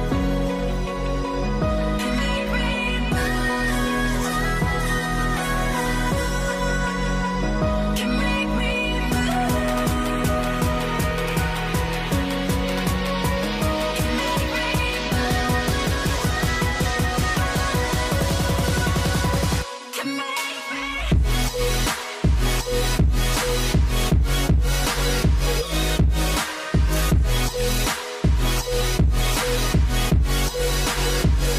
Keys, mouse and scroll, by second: 6.3 v, 7.1 alt+click, 9.5 right click, 11.1 alt+click, 11.8 alt+click, 12.2 alt+click, 15.0 right click, 17.2 double click, 19.5 alt+click, 20.7 right click, 22.1 alt+click, 23.5 alt+click, 24.2 v, 26.6 right click, 27.8-29.8 scroll down 1.